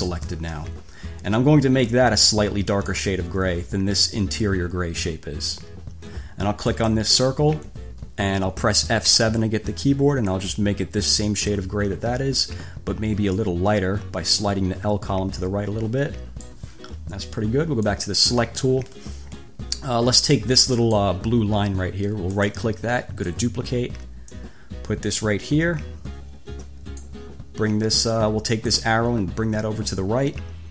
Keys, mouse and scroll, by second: 0.5 1, 2.9 click, 6.9 click, 9.3 F7, 10.5-11.7 drag, 13.5-16.9 drag, 18.1 click, 21.1 click, 22.5 click, 23.5 click, 24.6-27.5 drag, 28.9-30.7 drag.